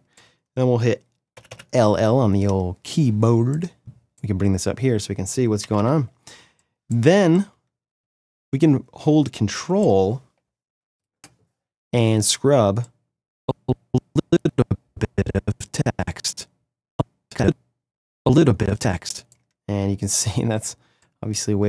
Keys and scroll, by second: 1.3 l, 5.6 =.